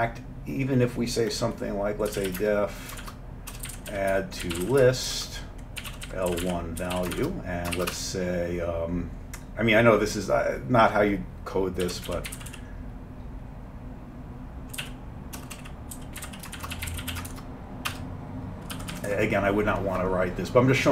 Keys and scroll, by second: 2.1-7.8 typing, 8.0 Return, 11.6-13.0 typing, 14.8-17.3 typing, 17.9 Return, 18.8 Down, 19.0 Down, 19.1 Down.